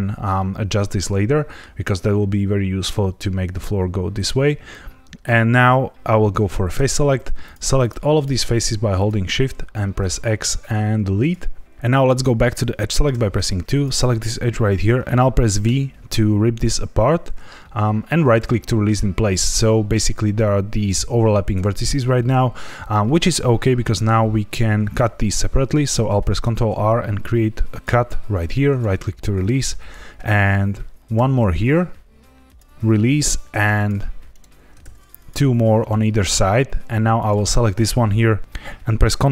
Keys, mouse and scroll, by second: 0.3 middle click, 6.7 3, 7.4 click, 7.7 shift+click, 8.1 shift+click, 8.5 shift+click, 9.3 shift+click, 9.9 x, 13.0 2, 13.6 click, 15.0 Escape, 15.0 ctrl+z, 15.6 v, 18.2 right click, 26.4 ctrl+r, 28.6 right click, 31.1 ctrl+r, 32.6 right click, 33.4 ctrl+r, 34.3 right click, 34.8 ctrl+r, 35.7 right click, 37.1 click, 38.4 x.